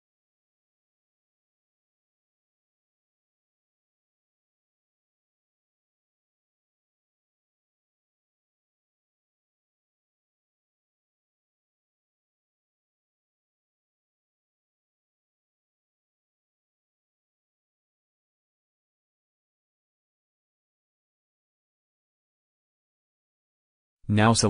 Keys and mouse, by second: 1.8 a, 2.7 b, 5.9 a, 6.8 middle click, 7.9 b, 8.1 click, 11.4 x, 13.0 Tab, 13.8 Tab, 14.4 KP_1, 16.1 a, 16.8 b, 21.1 x, 22.6 Tab.